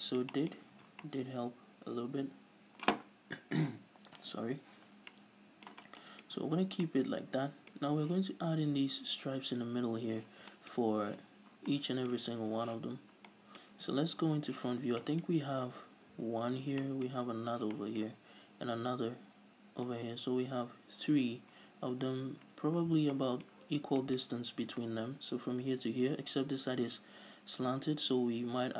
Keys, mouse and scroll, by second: 0.7 a, 0.9 scroll down 2, 5.1 scroll down 2, 5.9 scroll down 2, 6.4-6.9 scroll up 2, 7.9-10.3 scroll up 2, 10.3 scroll up 1, 10.5 scroll down 2, 11.6 scroll down 2, 13.1 scroll up 1, 13.5-28.7 middle drag, 14.1-15.1 scroll down 2, 15.4 scroll up 2, 20.1 scroll down 2, 22.7 scroll up 1, 23.8 scroll down 1.